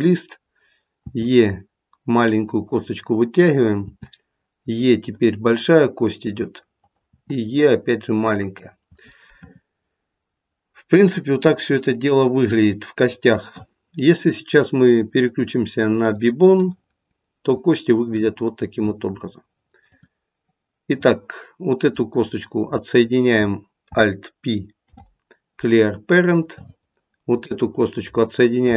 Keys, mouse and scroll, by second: 0.1 scroll up 1, 1.0 e, 3.8 e, 7.1 e, 14.8 click, 19.9 click, 21.8 click, 24.8 alt+p, 27.3 click.